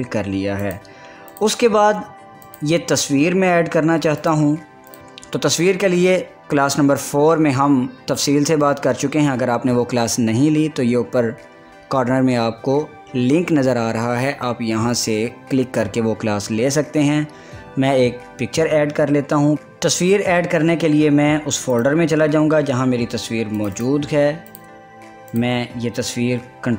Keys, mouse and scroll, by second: 0.7 click, 1.5 click, 19.5 click, 22.3 click.